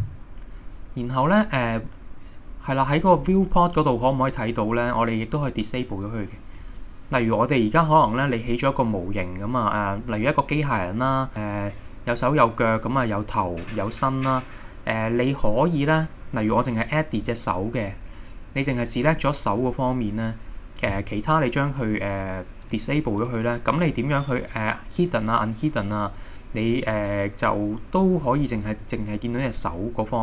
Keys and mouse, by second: 22.6 click, 23.2 click, 23.7 click, 24.3 click, 24.7 click, 25.0 click, 25.3 click, 25.9 click.